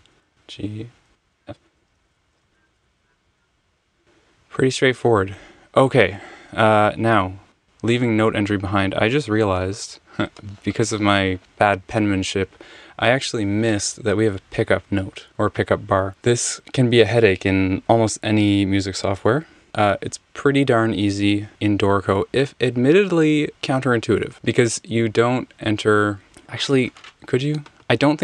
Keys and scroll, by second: 0.0-2.4 typing, 2.4 alt+super+Up, 2.8 alt+super+0, 2.9 alt+super+b, 4.0 Escape.